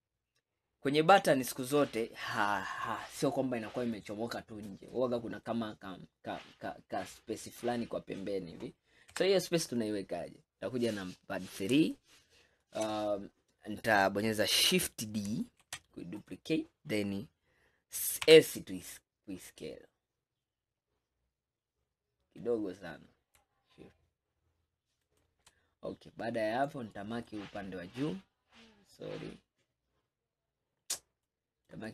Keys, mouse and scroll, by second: 2.8 scroll up 1, 3.4-8.0 middle drag, 9.2 KP_3, 10.0 scroll up 4, 10.8 scroll up 1, 11.3 scroll down 2, 12.0-13.0 shift+middle drag, 13.0-13.5 scroll up 2, 15.7 shift+d, 18.3 s, 25.8-26.7 scroll up 2, 26.7 click, 31.3 click.